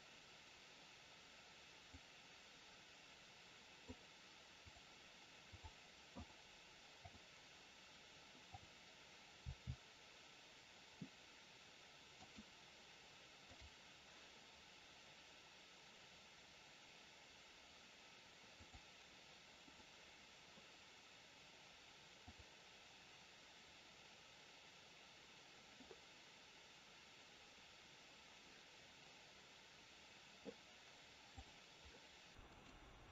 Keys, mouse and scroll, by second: 1.9 click, 4.5 click, 9.4 click, 9.4 r, 13.5 click, 18.5 click, 22.1 click, 32.3 shift+middle click, 32.4 click.